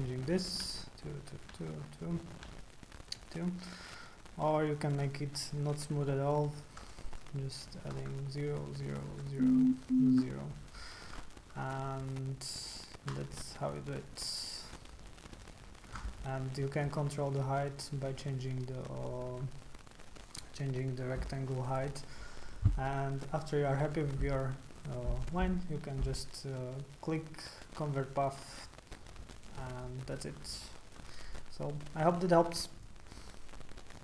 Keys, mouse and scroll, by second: 0.3 click, 0.6-2.5 typing, 1.0 click, 2.0 click, 3.1 click, 4.9 click, 6.0 KP_0, 6.0 KP_0, 6.4 click, 6.8 KP_0, 6.8 KP_0, 7.3 click, 7.6 click, 7.9 KP_0, 8.0 KP_0, 8.5 click, 8.8 click, 9.1 KP_0, 9.1 KP_0, 9.7 click, 10.1 KP_0, 10.1 KP_0, 13.0-15.8 drag, 16.8-21.5 drag, 28.5 click, 29.5 click, 32.8 click, 33.9 click.